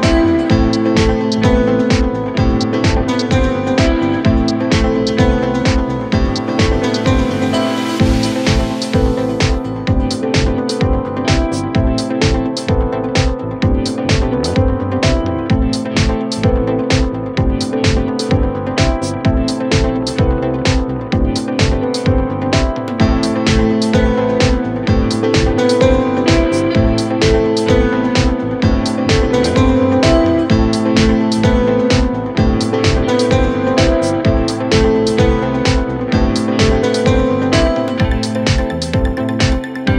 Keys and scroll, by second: 20.7 Delete, 26.4 F3, 35.1 F3, 37.5 b, 38.7 l.